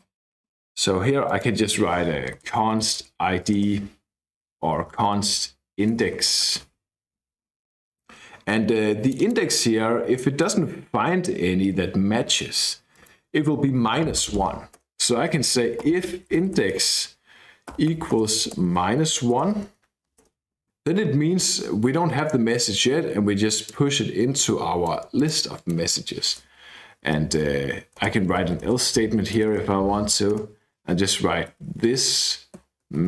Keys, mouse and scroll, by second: 1.2 click, 1.8-3.5 typing, 4.8 Left, 4.9 Left, 5.1 Left, 5.3 Left, 5.9-6.9 typing, 9.0 click, 12.9 click, 14.7 Return, 15.0-19.8 typing, 20.2 Return, 23.6-24.9 drag, 25.1 click, 26.3-29.6 typing, 30.3 Return, 31.3-33.0 typing.